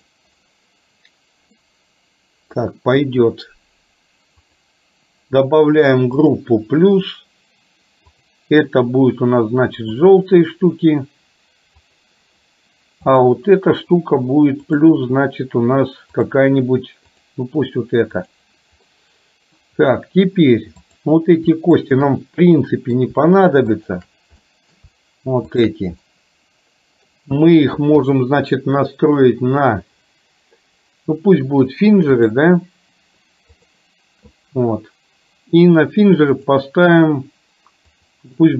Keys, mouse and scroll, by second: 0.1 click, 1.6-4.5 middle drag, 1.6-2.6 scroll up 1, 2.6-4.5 scroll down 1, 4.5 click, 6.3 click, 8.2-10.2 drag, 11.8 click, 13.2 click, 16.2-17.3 drag, 18.2 click, 19.0-19.7 middle drag, 21.8 shift+click, 22.6 middle click, 23.7 shift+click, 24.6 middle click, 25.7 shift+drag, 26.1-27.1 middle drag, 28.2-32.5 drag, 33.7 click, 36.3 click, 38.1-38.5 drag.